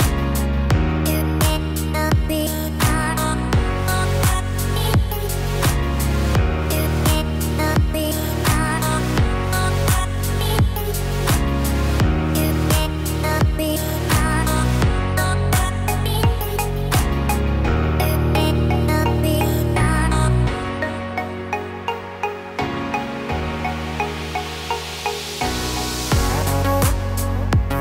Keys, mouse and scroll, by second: 1.5 shift+click, 2.5 middle click, 4.5 z, 6.5 shift+click, 7.7 shift+click, 10.2 z, 11.7 middle click, 13.6 g, 20.8 middle click, 21.2 middle click, 22.2-24.3 scroll up 1, 25.2 click, 26.1 middle click.